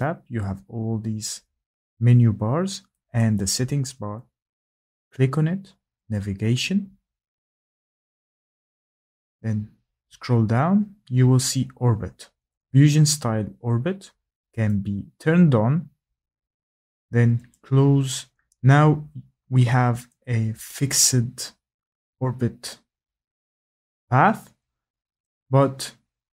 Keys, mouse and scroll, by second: 3.1 click, 6.1 click, 8.1 scroll, 14.6 click, 17.5 click, 25.2 click, 25.8-26.3 scroll down 4.